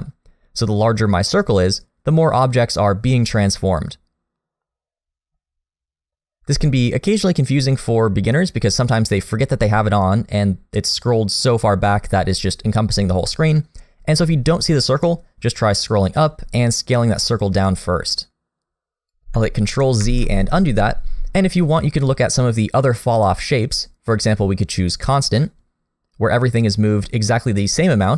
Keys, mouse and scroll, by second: 20.0 ctrl+z, 22.0 click, 26.3 click.